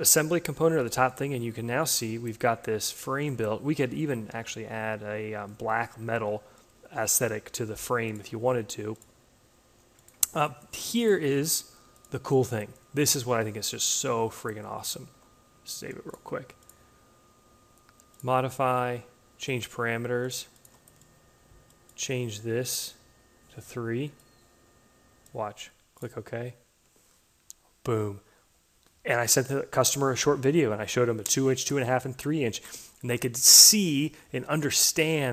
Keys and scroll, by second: 3.7 a, 14.5 ctrl+s, 23.4 3.